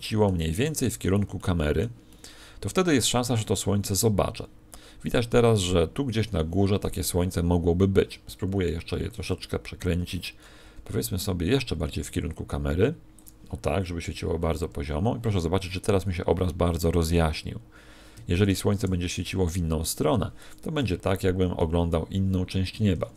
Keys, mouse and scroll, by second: 0.6 middle click, 2.0 middle click, 8.8 Escape, 10.6 KP_1, 10.8 KP_3, 12.0 r, 13.2 click, 18.1 Escape, 18.8 r, 20.4 click, 22.6 Escape.